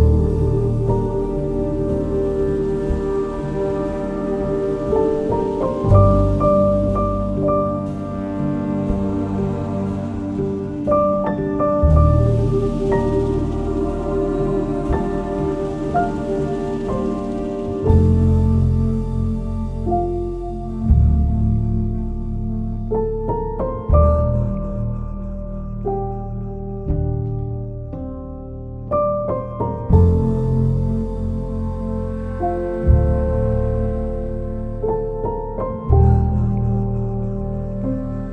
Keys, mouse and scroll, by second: 2.5 click, 4.5 ctrl+v, 7.2-16.5 drag, 17.4 right click, 30.9 click, 31.2 ctrl+s, 32.3 click, 36.8-38.1 typing.